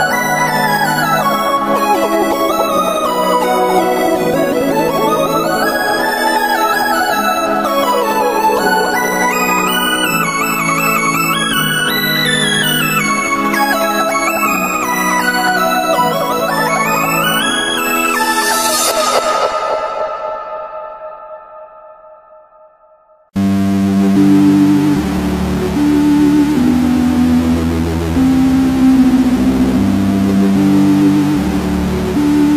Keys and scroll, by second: 5.6 n, 9.2 g, 10.9 n, 18.6 n, 20.0 n, 23.2 s, 23.6 g, 25.7 s.